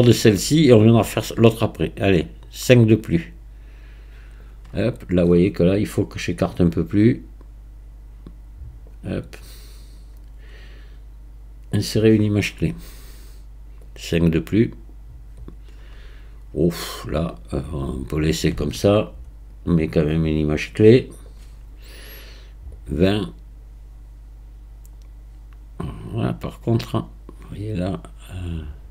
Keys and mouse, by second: 2.2-4.4 drag, 6.7-8.9 drag, 9.8-11.9 drag, 13.8-15.4 drag, 19.6-21.3 drag, 22.7-28.9 drag.